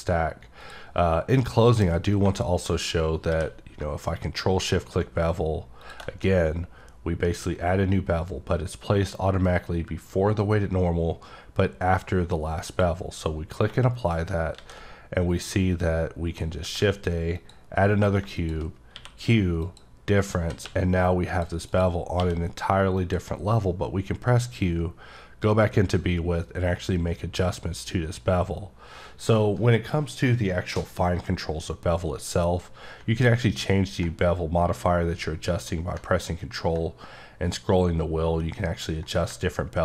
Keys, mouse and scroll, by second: 0.6 click, 1.4 middle click, 5.8 click, 12.7 click, 14.1 right click, 15.3 click, 17.4 click, 18.4 click, 19.6 click, 21.3 click, 21.7 click, 23.0 click, 33.3-34.7 scroll up 1, 37.4-38.4 scroll up 2, 39.7 scroll up 3.